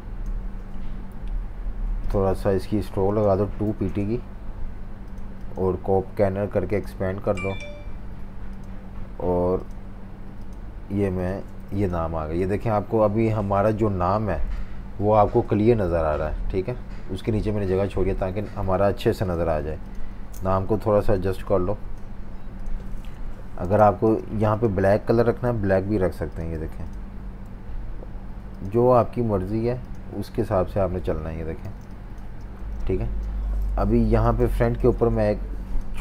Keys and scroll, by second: 14.4 F19, 19.5 super+3, 20.0 super+3, 23.1 super+-, 23.7 space, 25.4 i, 26.7 v, 31.7-36.0 typing, 33.7 super+-.